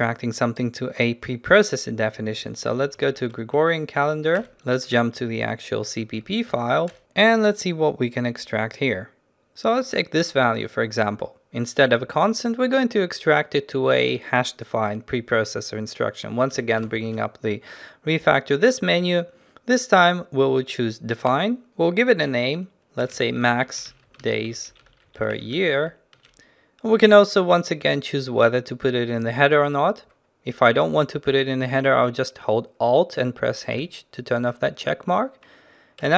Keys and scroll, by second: 2.8 ctrl+n, 4.4 ctrl+n, 4.9 ctrl+b, 16.9 ctrl+alt+shift+t, 19.8 ctrl+alt+shift+t.